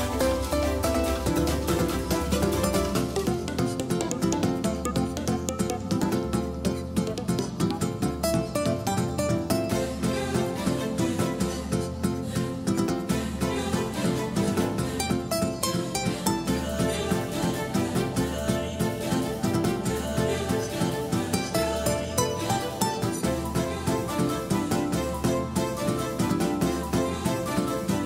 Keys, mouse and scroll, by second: 5.2 KP_1, 7.7-10.3 drag, 12.0 middle click, 15.0 KP_3, 17.8-20.3 drag, 22.9-25.6 middle drag.